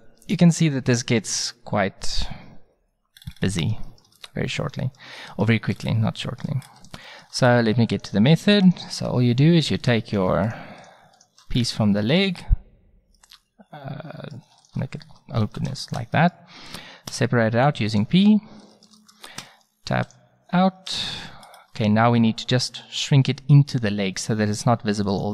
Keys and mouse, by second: 3.2 click, 6.1 middle click, 7.9-11.7 drag, 11.7-12.0 right drag, 12.4-12.8 middle drag, 13.7 middle drag, 14.2 middle click, 14.6-15.1 right drag, 15.1 middle click, 15.4 ctrl+z, 17.1 p, 18.8 click, 19.4 Tab, 20.9 Tab, 21.6-24.1 middle drag, 25.1-25.3 middle drag.